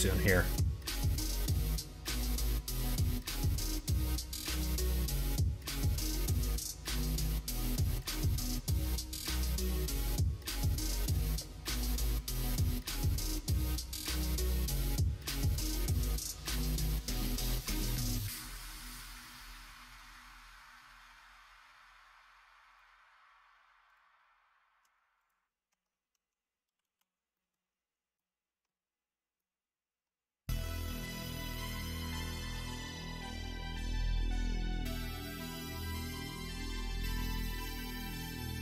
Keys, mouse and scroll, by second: 0.4 q, 3.5 q, 8.7-12.2 drag, 9.8 KP_0, 9.9 KP_0, 12.8-16.5 drag, 14.4 Right, 14.7 Right, 14.9 Right, 19.0-20.0 drag, 25.1 click, 25.6 Tab, 26.7 alt+z, 27.3 middle click, 28.0 middle click, 29.3-30.3 middle drag, 31.0 middle click, 31.5 Tab, 32.7 middle click, 33.2 shift+middle click, 37.1 shift+middle click, 37.7 middle click, 38.3 click.